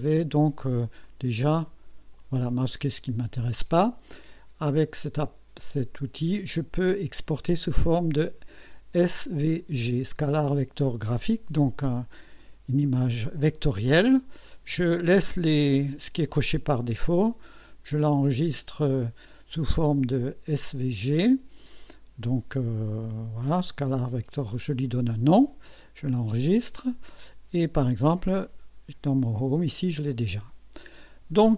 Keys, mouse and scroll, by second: 0.3 click, 1.1 click, 1.7 click, 5.2 click, 12.4 click, 14.5 click, 17.4 click, 26.5 click, 28.5 click, 29.4 click.